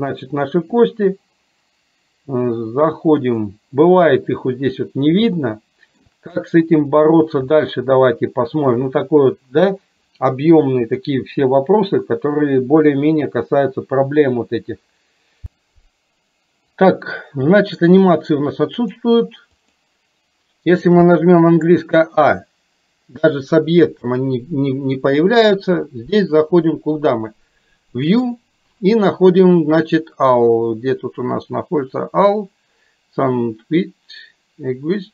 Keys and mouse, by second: 0.8 click, 3.3 click, 5.4 shift+middle click, 7.7-8.8 shift+middle drag, 18.7 click, 19.6 click, 24.1 click, 28.1-35.1 drag.